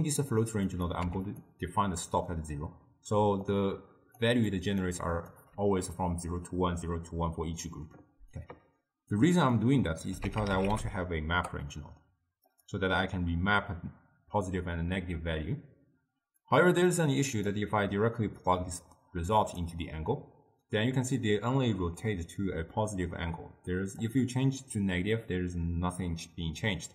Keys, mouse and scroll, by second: 0.8 click, 3.3-5.5 typing, 3.6 click, 4.6 click, 5.1 drag, 9.3-12.5 drag, 16.5-17.6 drag, 18.5-21.6 drag, 24.1-26.9 drag.